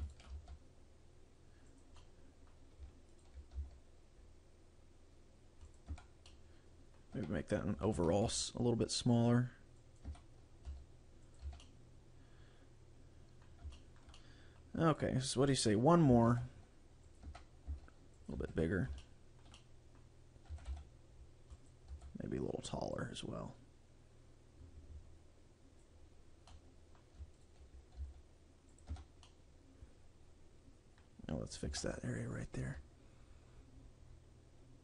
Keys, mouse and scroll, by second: 0.2 shift+right click, 0.4 g, 1.9 click, 2.0 middle click, 3.2 alt+right click, 3.6 s, 5.8 click, 6.0 Tab, 6.2 scroll down 1, 6.4 middle click, 7.3 Tab, 7.8 a, 8.1 a, 8.4 s, 10.1 click, 10.2 Tab, 10.7 s, 11.4 click, 11.5 a, 11.7 middle click, 13.8 shift+middle click, 14.0 shift+scroll down 1, 14.2 middle click, 15.0 right click, 15.3 scroll down 2, 15.6 middle click, 16.5 shift+d, 17.2 click, 17.4 Tab, 17.8 s, 18.4 click, 18.5 a, 18.6 right click, 19.0 shift+middle click, 19.6 middle click, 20.6 a, 20.8 c, 22.1 right click, 23.0 click, 26.6 middle click, 27.4 alt+right click, 28.1 s, 28.9 click, 29.0 Tab, 29.4 middle click, 31.8 Tab, 32.4 right click.